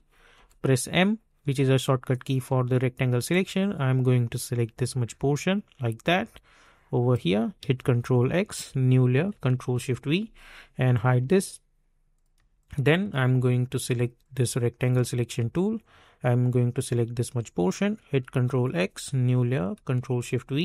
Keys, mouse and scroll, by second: 0.3 m, 2.0-2.5 alt+scroll down 1, 3.3-7.6 drag, 7.6 ctrl+x, 9.1 click, 9.7 ctrl+shift+v, 10.9 click, 12.3 space, 12.5 click, 12.8 space, 14.2-18.2 drag, 18.2 ctrl+x, 19.5 click, 20.1 ctrl+shift+v.